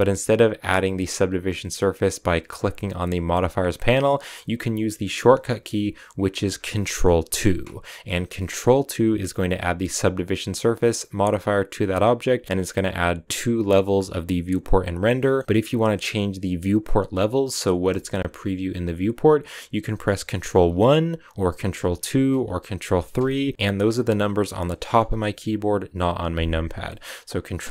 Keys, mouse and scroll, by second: 0.9-4.2 drag, 4.2 middle click, 4.6-4.9 scroll down 1, 4.9-7.4 middle drag, 7.4 ctrl+2, 11.2-11.8 scroll up 1, 11.8-14.3 scroll up 1, 14.3-15.0 scroll up 1, 15.0-20.9 middle drag, 20.9 ctrl+1, 21.9 ctrl+2, 23.4 ctrl+3, 23.5-27.7 middle drag.